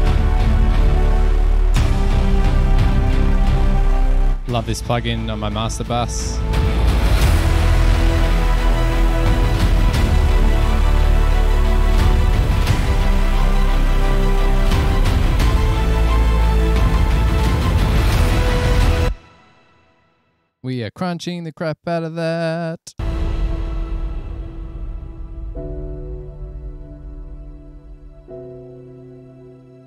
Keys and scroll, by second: 19.3 space, 23.2 space.